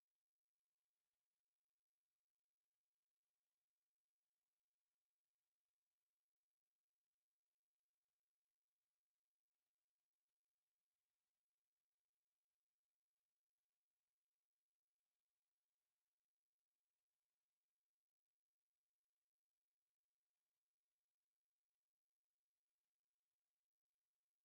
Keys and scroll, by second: 0.2-3.4 typing, 2.8 Escape, 5.6 e, 5.7 space, 6.4 Escape, 7.9 e, 10.6 x, 10.8 space, 11.6 space, 12.2 Escape, 12.2 space, 12.7 Escape, 14.4-16.2 typing, 15.4 Escape, 16.5 Return, 16.9 Escape, 17.6 space, 17.7 2, 18.1 Escape, 18.5 space, 18.9 Escape, 19.5 o, 19.6 space, 21.5 Escape, 23.0 p, 23.4 space, 24.1 F8.